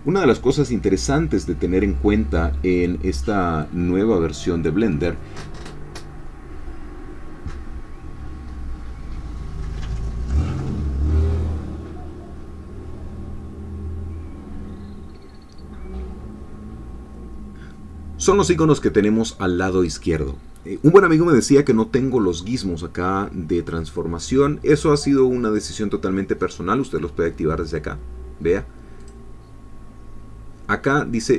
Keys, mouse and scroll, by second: 25.4 click, 29.0 click.